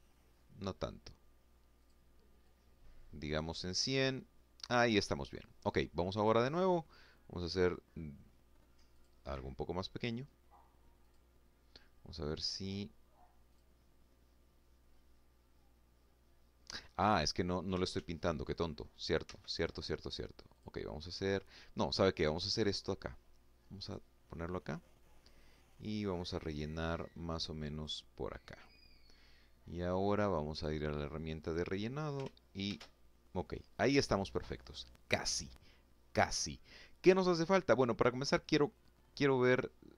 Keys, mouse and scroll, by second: 0.5 click, 1.1-2.2 drag, 4.8 click, 7.6 click, 9.7 click, 11.1 click, 12.2 click, 16.6 ctrl+z, 18.0 ctrl+z, 19.2 click, 22.5 click, 24.4-26.7 drag, 29.2 click, 30.2 click, 31.4 ctrl+shift+a.